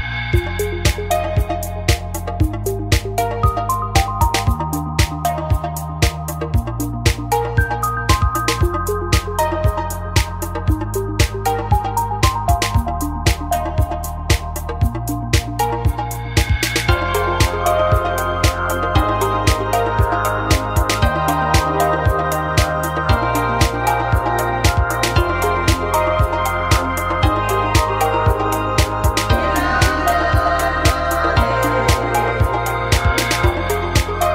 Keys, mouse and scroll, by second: 1.4 g, 2.8 click, 3.9 g, 5.0 click, 5.7-7.2 right drag, 7.2 g, 8.7 right click, 8.8 g, 10.1-11.1 drag, 10.1-11.1 right drag, 11.3 click, 11.3-12.5 right drag, 11.9 g, 14.8 click, 14.8-17.6 right drag, 15.6 f, 15.7 a, 17.2 f, 17.3 a, 18.5-21.0 right drag, 19.5 f, 19.6 a, 20.7 g, 21.4 right click, 21.6 f, 21.7 a, 22.4 click, 22.8 g, 25.0 click, 25.0 right click, 25.2 g, 26.1-27.3 drag, 26.1 a, 28.8 z, 30.0 a, 30.6 KP_1, 32.0 e.